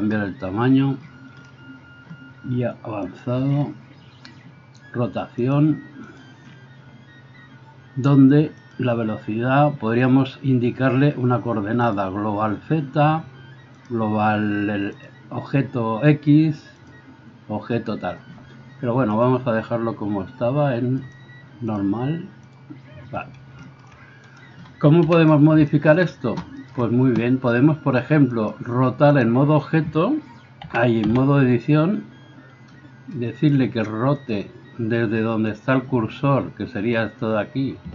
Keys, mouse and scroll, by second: 3.2-5.4 middle drag, 5.4-37.9 drag, 24.3 middle click, 24.3 right click, 25.0 KP_1, 30.7 a, 31.1 a.